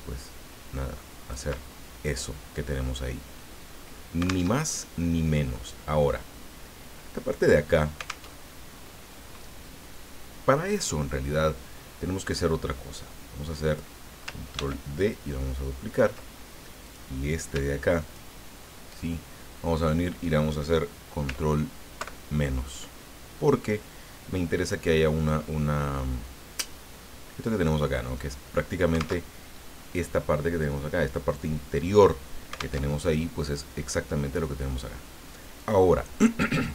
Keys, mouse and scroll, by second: 4.5 alt+Tab, 8.3 alt+Tab, 12.9-14.0 drag, 14.5 ctrl+d, 15.1-16.3 ctrl+drag, 16.8 click, 18.0 shift+click, 22.0 ctrl+KP_Subtract, 29.2 alt+Tab, 32.8 alt+Tab, 35.6 click.